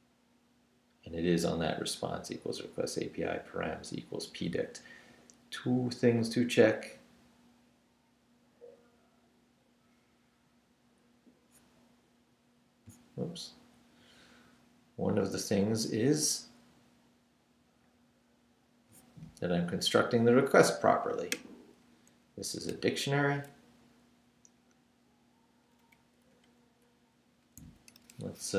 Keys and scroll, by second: 22.1 Up, 22.6 Left, 22.7 Right, 23.5 Left, 26.3 Up, 27.6 Down, 27.9 Right.